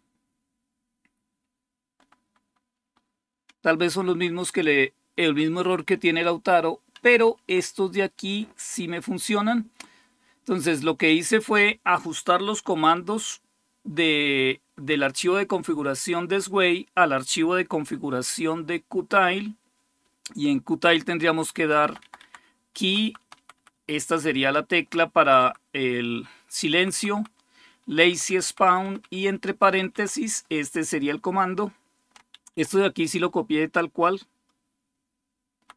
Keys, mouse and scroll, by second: 0.4-2.0 Right, 2.3 Right, 2.6 Right, 3.5 Left, 3.7 Left, 3.9 Left, 4.6-5.7 Left, 5.9 Left, 6.8 Down, 8.8-10.7 Left, 8.8-10.3 typing, 19.8 Left, 20.5 Left, 20.6-21.7 Left, 21.8 Left, 22.6 Right, 22.8 Right, 23.0 Right, 23.2 Right, 23.3-24.7 Right, 25.0 Right, 25.2 Right, 26.6 Right, 26.9 Right, 27.7 Right, 28.1 Right, 28.3 Right, 28.4 Right, 28.6 Right, 28.8 Right, 29.0 Right, 29.3 Right, 29.5 Right, 29.7 Right, 31.9 Right, 32.1 Right, 32.1 Left, 32.4 Left, 32.5-35.6 Left, 33.1 Right, 33.7-35.3 Right, 35.6 Right.